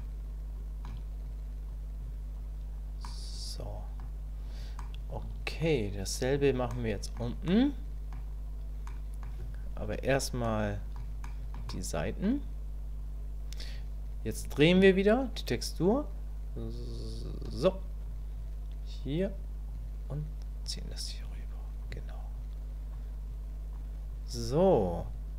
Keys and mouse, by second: 1.2 click, 2.0 click, 3.0 click, 4.8 shift+middle click, 6.7 shift+click, 7.5 click, 8.9 click, 10.5 click, 11.2 shift+click, 11.7 click, 15.1-17.5 ctrl+drag, 18.1-19.2 drag, 19.7 click, 21.2 click, 22.3 click, 23.2 click, 24.1 click.